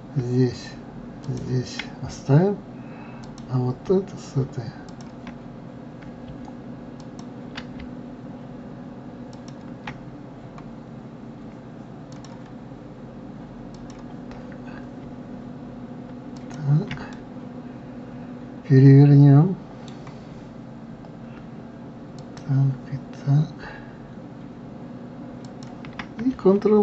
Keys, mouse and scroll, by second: 1.7 shift+click, 3.6 click, 5.3 shift+click, 7.4 ctrl+click, 9.7-10.5 shift+drag, 10.5-11.2 scroll up 4, 12.5 click, 14.2 click, 15.0 scroll down 3, 16.8 shift+click, 17.6-20.5 middle drag, 22.6 shift+click, 25.9 shift+click.